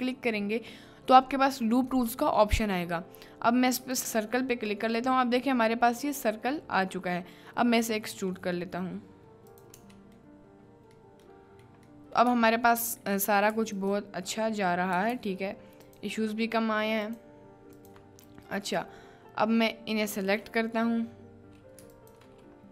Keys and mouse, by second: 5.0 middle click, 8.2 e, 9.7 Tab, 10.4 middle click, 11.4 middle click, 12.0 middle click, 12.4 Tab, 13.1 middle click, 13.6 3, 14.2-15.8 middle drag, 16.0-17.0 shift+middle drag, 17.1 shift+middle click, 17.9 shift+middle click, 18.9-22.1 middle drag, 22.1 ctrl+click, 22.2 middle click.